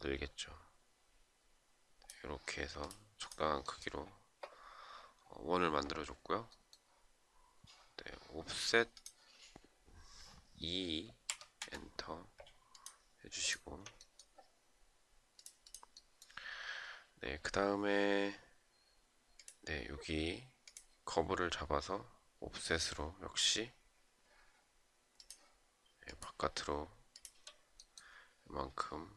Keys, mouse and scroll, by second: 11.2 Return, 13.0 shift+click, 26.8 shift+click, 28.9 shift+click.